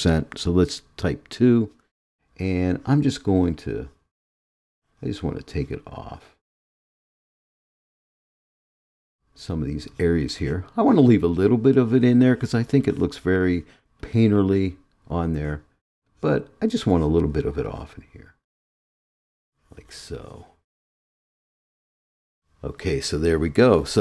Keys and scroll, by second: 1.2 2.